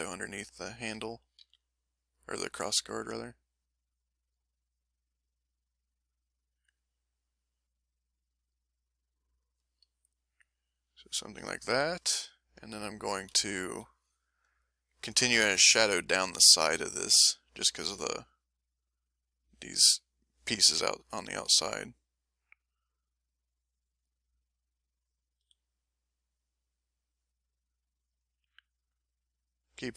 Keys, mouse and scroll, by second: 0.1 middle click, 1.4 f, 2.0 click, 3.0-9.6 drag, 9.9-11.3 drag, 11.7 m, 12.2 click, 13.3 l, 13.7 l, 14.1 middle click, 14.7 middle click, 16.5 ctrl+click, 17.0 ctrl+click, 18.2 click, 20.5 click, 21.6 click, 23.3 click, 25.4 f, 25.7 click, 26.2 click, 27.0 click, 27.9 click, 28.6 click, 29.3 click, 29.8-29.9 drag.